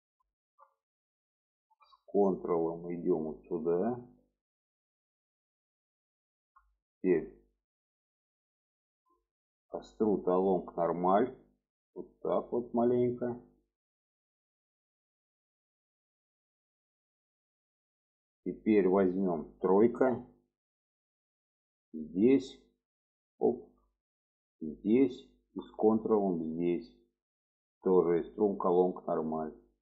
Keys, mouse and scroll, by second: 0.9 shift+middle click, 4.0 ctrl+click, 5.2-6.7 middle drag, 6.9 shift+middle click, 9.1-15.7 drag, 16.1 middle click, 17.4 middle click, 18.4 middle click, 19.1 shift+middle click, 20.6 3, 22.0 click, 22.8 middle click, 23.5 shift+middle click, 24.7 click, 25.2 shift+middle click, 26.4 ctrl+click, 26.8 middle click, 27.4-27.9 scroll down 2, 27.6 shift+middle click, 29.6-29.8 drag.